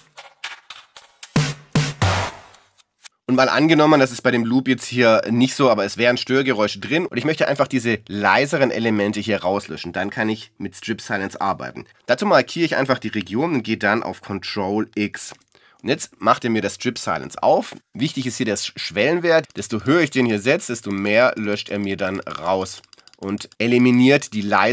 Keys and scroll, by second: 3.8 Return.